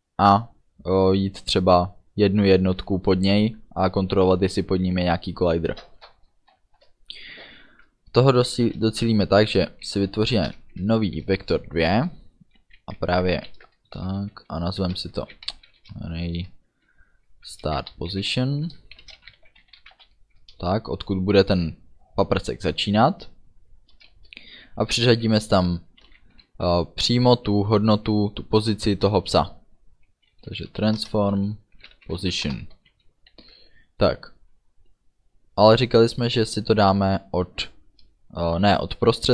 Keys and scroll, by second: 9.5 shift+v, 9.7 e, 10.5 Return, 11.4 space, 12.8-15.8 typing, 17.5-20.5 typing, 24.0 =, 24.2 space, 26.0 t, 26.1 r, 30.7-32.8 typing, 31.0 Return, 32.5 Return, 33.4 ctrl+s.